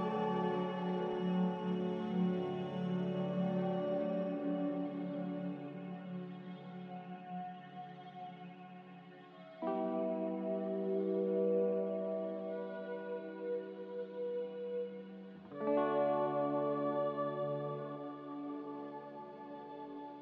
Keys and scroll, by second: 16.7 1, 16.9 Return, 20.0 a.